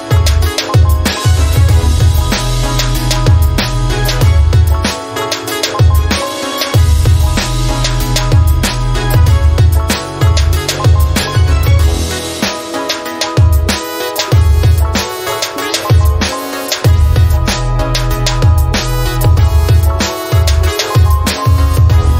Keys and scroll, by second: 0.1-6.2 typing, 6.3 Return, 16.6-17.3 typing, 18.0 Tab, 18.4-19.5 typing, 19.9 Return, 21.3-22.1 typing.